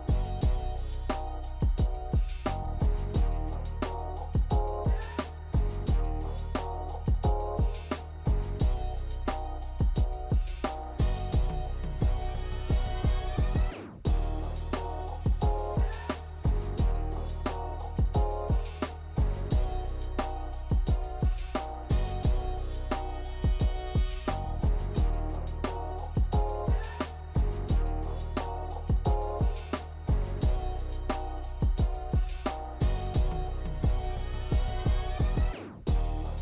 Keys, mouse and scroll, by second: 0.4 click, 1.4 0, 3.5 click, 4.5 click, 5.7 space, 12.8 space, 15.0 click, 16.2 click, 17.3 click, 30.8 click, 31.8 click, 33.0 click.